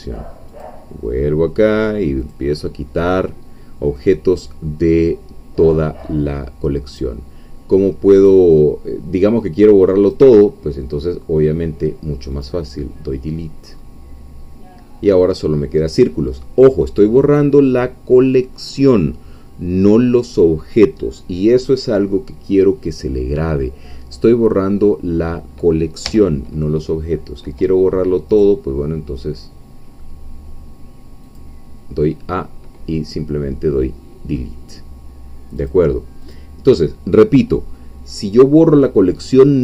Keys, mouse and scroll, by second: 0.5 click, 2.2 click, 5.0-5.6 scroll down 1, 5.6-6.3 scroll up 1, 7.0 click, 8.2 click, 10.1 middle click, 12.4 click, 13.6-14.0 scroll up 1, 16.4-16.8 scroll down 1, 17.2-17.6 scroll down 1, 17.6-18.6 scroll up 2, 18.8 scroll up 1, 26.0 a, 28.3 right click, 31.2 click, 35.6 click, 36.3-39.6 drag.